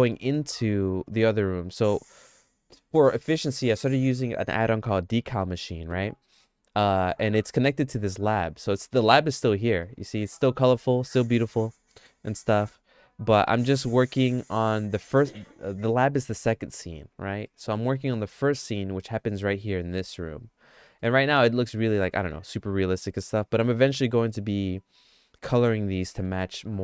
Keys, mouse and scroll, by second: 8.6-9.7 shift+middle drag, 9.8 middle click, 10.3 middle click, 10.7-13.5 shift+middle drag, 13.7 middle click, 14.6 shift+middle click, 15.4 middle click, 15.8 shift+middle click, 17.5 middle click, 18.6 shift+middle click, 21.0 middle click, 21.6 shift+middle click, 22.3 middle click, 26.2 middle click.